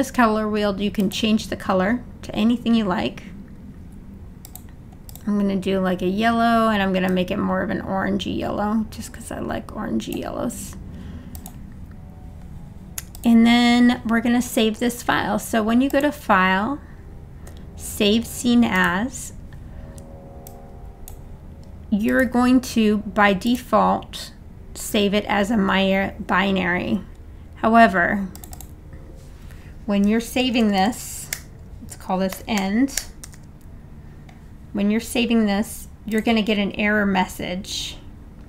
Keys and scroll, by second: 30.0 Right, 30.4 BackSpace, 32.3-33.8 typing.